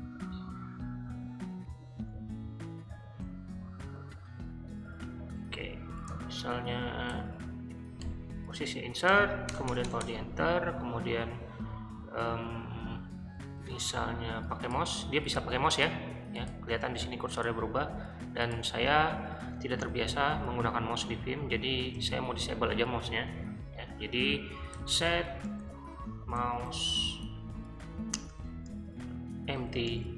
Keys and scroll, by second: 2.0 super+z, 3.3 super+Tab, 5.1 super+`, 7.1-8.0 typing, 9.1-10.0 typing, 10.0 Return, 10.8 ctrl+r, 13.4 k, 14.7 k, 15.3 k, 19.5-21.9 typing, 24.5-28.4 typing, 29.6 shift+'.